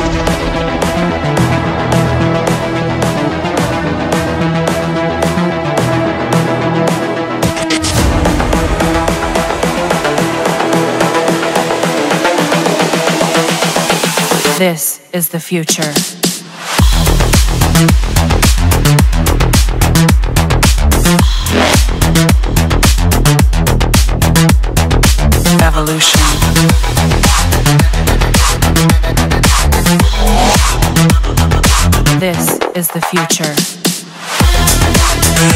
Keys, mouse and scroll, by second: 0.5 click, 2.0 click, 5.2 middle click, 6.7 click, 8.5 click, 8.7 click, 9.8 click, 10.5-11.7 middle drag, 12.1 click, 15.9 middle click, 17.0 middle click, 19.7 middle click, 19.7-20.3 scroll, 21.2 middle click, 21.4 scroll, 22.9 click, 23.7 click, 25.5 click, 27.4 click, 27.6 click, 28.7 click, 30.4 click, 30.7 Return, 30.7-32.1 typing, 33.4 scroll, 35.3 middle click.